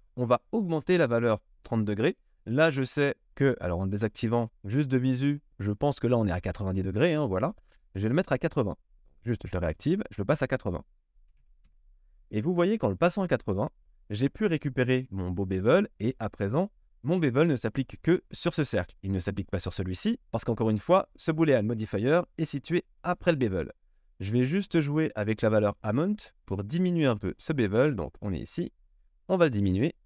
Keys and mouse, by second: 0.9 click, 1.0-3.3 middle drag, 3.3 click, 3.5-8.4 middle drag, 8.4 click, 9.2 middle click, 9.4 click, 9.5 middle click, 10.0-22.7 drag, 13.7 KP_1, 22.7 middle click, 23.0 click, 23.2-29.0 middle drag, 29.0-30.0 shift+drag.